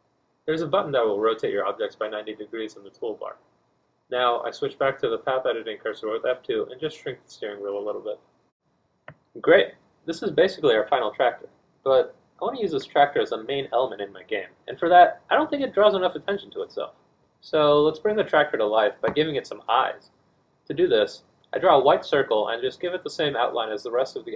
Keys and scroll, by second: 3.2 z, 3.4 z, 12.1 F1, 14.8 4, 15.0 Tab, 22.7 F1.